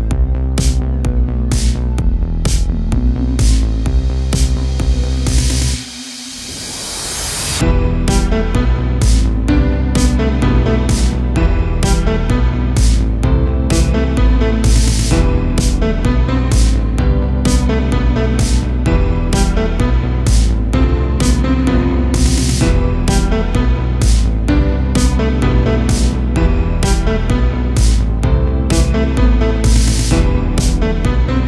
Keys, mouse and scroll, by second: 1.2 a, 1.4 click, 1.8 g, 2.7 a, 2.9-3.6 scroll down 1, 3.6-5.7 middle drag, 5.7-6.2 scroll up 2, 6.2 2, 6.7 click, 7.3 g, 8.9 a, 9.2 Tab, 9.4-10.2 scroll down 2, 9.6 a, 10.2-11.8 middle drag, 11.8-12.4 scroll up 1, 12.4-12.9 scroll up 2, 12.9-16.6 shift+middle drag, 16.6-17.2 scroll up 4, 17.2-17.7 shift+middle drag, 17.7 click, 18.6 2, 18.9 click, 19.2 g, 20.8 g, 21.4 a, 21.7 a, 22.1 click, 22.4 g, 23.5 g, 24.3 a, 24.5 a, 24.8-25.2 scroll down 1, 25.2 middle click, 25.7-26.4 scroll down 1, 26.4-27.5 middle drag, 27.5 3, 27.7 click, 28.4 click, 29.1 click, 29.9 click, 30.4 shift+click, 31.0-31.4 shift+middle drag.